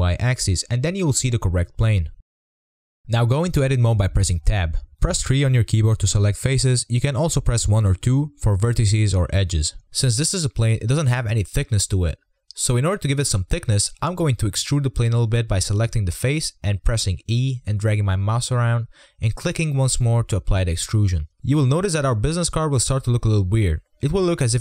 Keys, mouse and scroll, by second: 0.5 click, 0.6-0.9 scroll up 7, 0.9 shift+middle drag, 1.0 scroll down 6, 1.2 middle drag, 1.5-2.0 scroll up 3, 2.0-2.5 scroll up 2, 2.5 click, 3.2 Tab, 5.6 click, 6.4 3, 7.6 2, 7.8 1, 8.3 3, 9.4 click, 9.9 click, 10.8-12.1 scroll up 2, 17.5 e, 22.6 click, 23.3 Tab, 24.3 Tab.